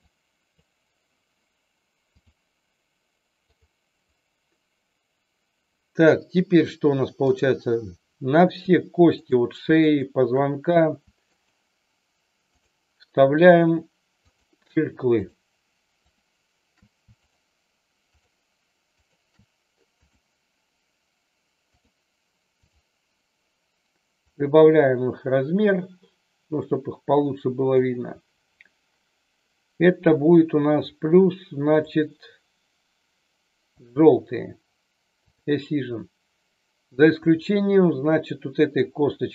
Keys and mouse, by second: 0.1-0.6 drag, 2.1 click, 3.4 click, 7.3-7.8 drag, 9.2-10.3 shift+drag, 11.3-12.0 shift+drag, 14.2-14.7 shift+drag, 15.1-15.7 shift+drag, 16.1 shift+click, 17.2 shift+click, 18.1 shift+click, 19.0 shift+click, 19.8-21.8 drag, 22.6 click, 24.2-27.7 drag, 30.7 click, 31.7-34.0 drag, 37.1 click.